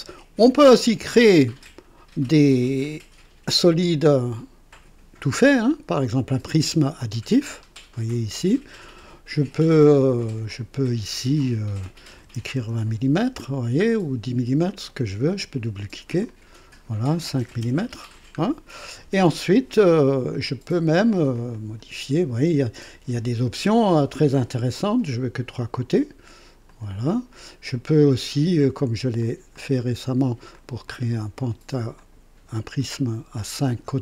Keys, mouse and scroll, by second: 1.3 click, 6.2 click, 7.4-7.8 scroll up 2, 8.1-8.8 right drag, 10.4 click, 12.1 KP_2, 12.5 KP_0, 12.5 Return, 12.5 KP_Enter, 13.6 scroll down 1, 14.7 click, 16.2 click, 17.4 KP_5, 21.3 click, 25.0-25.3 scroll down 2, 26.6 click, 27.7-28.8 drag, 29.2 click, 29.7 click, 30.5 ctrl+click, 31.0 ctrl+click, 32.0 ctrl+click, 32.5-34.0 ctrl+drag.